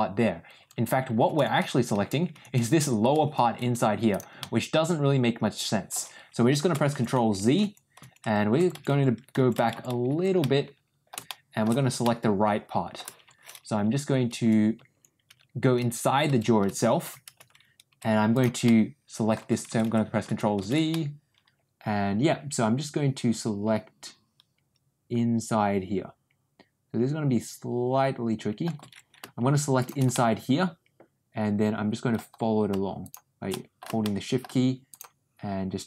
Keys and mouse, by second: 4.3-5.8 middle drag, 10.3 ctrl+middle click, 11.2 ctrl+shift+middle click, 11.9 ctrl+middle click, 18.5 middle click, 20.8-28.5 ctrl+middle drag, 30.0-32.0 ctrl+middle drag, 33.4 middle click, 33.9 shift+middle click.